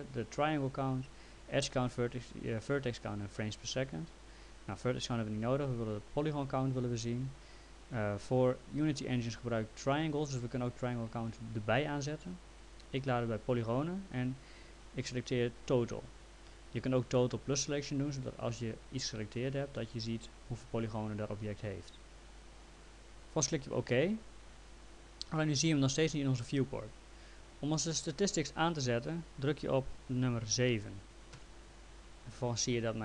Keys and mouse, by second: 4.7 click, 23.9 click.